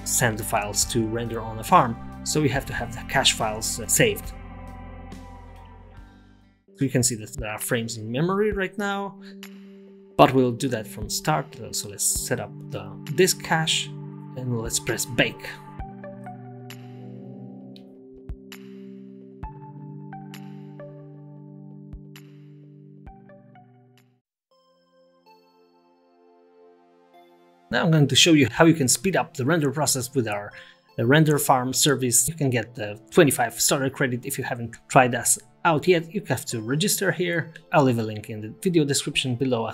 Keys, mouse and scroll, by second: 4.4-5.7 scroll down 7, 5.7 click.